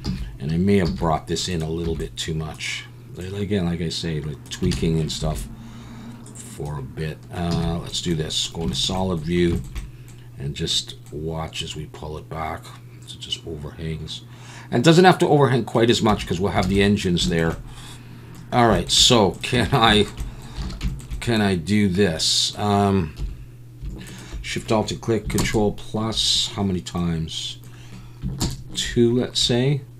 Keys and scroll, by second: 0.0 z, 0.9 z, 1.8 b, 4.7 alt+a, 5.2 b, 7.5 z, 16.1 Tab, 16.6 alt+a, 19.5 Tab, 20.6 alt+a, 23.2 3, 25.4 ctrl+KP_Add.